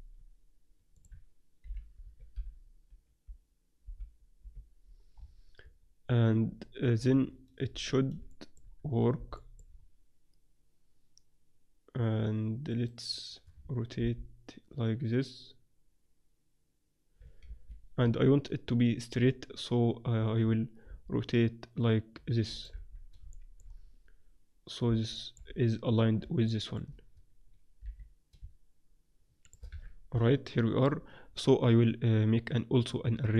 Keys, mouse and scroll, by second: 0.9-2.9 drag, 5.1-7.7 middle drag, 7.7-9.4 drag, 7.7 z, 9.4-11.3 middle drag, 12.7-14.4 right drag, 13.9 r, 18.0 z, 19.1 z, 19.9 z, 20.8 r, 22.7 z, 22.9-25.3 drag, 25.3-28.3 middle drag, 27.8 r, 29.7 z, 29.7 middle click, 29.9-31.0 drag, 30.1 a, 32.7-33.3 drag.